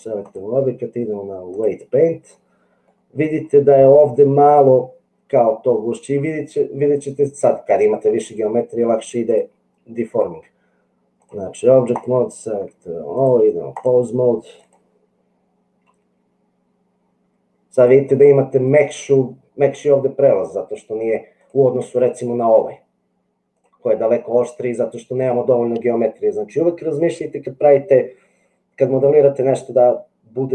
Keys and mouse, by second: 0.2-1.8 drag, 3.2 middle click, 9.4-11.3 drag, 13.1 click, 15.8 g, 22.2 g.